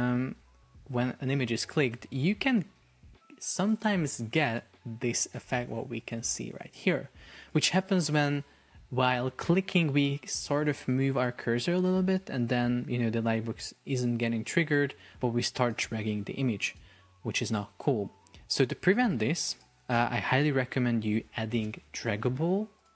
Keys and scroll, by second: 18.4 Escape.